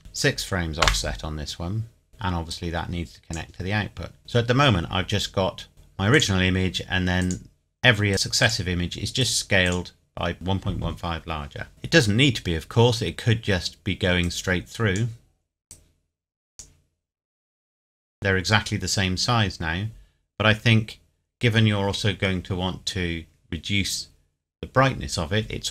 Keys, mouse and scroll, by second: 0.0 KP_6, 0.8 KP_Enter, 2.1 shift+middle click, 2.5 click, 5.7 click, 14.2 click, 17.8 scroll down 1.